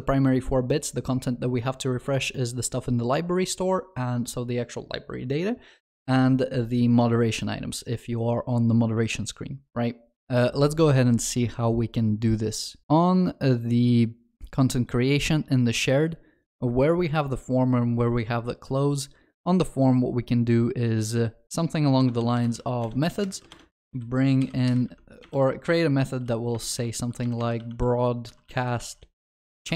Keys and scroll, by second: 22.8 Return, 24.8 Tab.